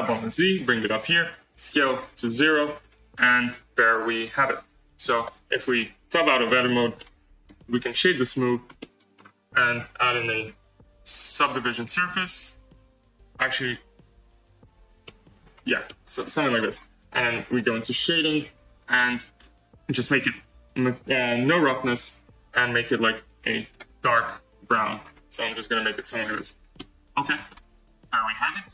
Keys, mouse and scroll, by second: 1.6 s, 3.9 Tab, 5.2 Tab, 6.0 Tab, 6.7 alt+z, 6.9-8.3 middle drag, 8.3 right drag, 8.6 scroll up 1, 8.7-9.2 middle drag, 9.2-9.6 scroll up 3, 9.6 scroll down 4, 14.2-14.8 drag, 14.8 scroll up 1, 15.0-15.6 middle drag, 15.6 scroll up 2, 15.8-16.2 middle drag, 16.2-16.7 scroll down 5, 17.4 click, 17.9-18.6 scroll down 3, 18.9-23.2 drag, 26.4 scroll up 1, 26.7-28.3 middle drag, 28.3 click.